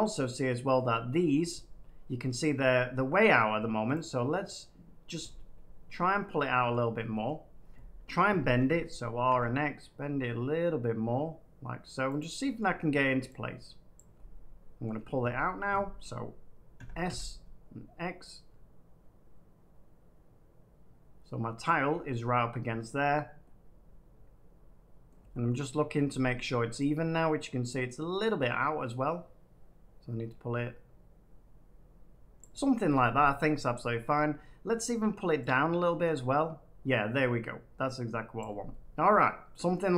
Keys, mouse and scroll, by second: 1.3 middle click, 2.5 middle click, 5.0 click, 6.6 middle click, 7.2 middle click, 8.5 r, 12.1 click, 12.5 middle click, 13.9 click, 14.8 middle click, 16.7 s, 17.0 x, 21.6 click, 25.0 middle click, 25.9 middle click, 32.3-33.3 drag, 34.0 middle click, 38.3 click.